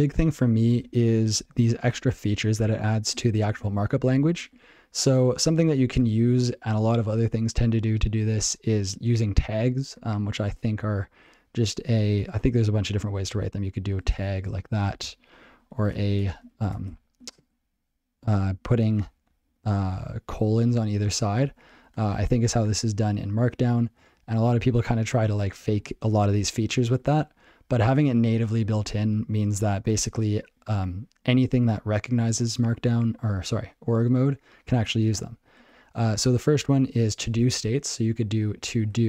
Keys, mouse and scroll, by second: 0.1 ctrl+n, 0.2 ctrl+n, 0.5 ctrl+p, 0.7 ctrl+space, 0.8 ctrl+n, 1.0 ctrl+n, 1.3 ctrl+n, 1.5 ctrl+g, 1.8 ctrl+p, 2.0 ctrl+p, 2.4 ctrl+p, 3.1 ctrl+p, 4.9 ctrl+e, 13.9-14.8 typing, 14.9 ctrl+g, 19.3 ctrl+b, 20.3 ctrl+e, 25.6 BackSpace, 26.2 ctrl+n, 26.4 ctrl+n, 26.6 ctrl+n, 31.0 alt+b, 31.2 alt+c.